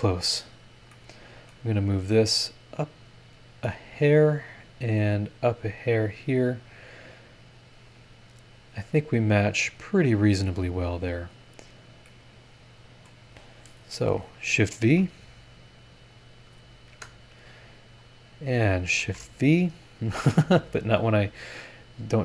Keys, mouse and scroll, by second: 0.9 middle click, 1.0 click, 1.0 right click, 1.7 scroll up 1, 3.0-4.2 drag, 5.0-6.1 drag, 7.1 click, 8.1 scroll down 1, 11.5 scroll down 1, 12.1-13.2 middle drag, 12.2-13.2 drag, 13.9 click, 14.8 shift+v, 15.9 click, 16.4 click, 16.9 KP_Enter, 17.9 middle click, 18.5 click, 19.0 shift+v, 20.1 BackSpace, 21.6 click, 22.1 click.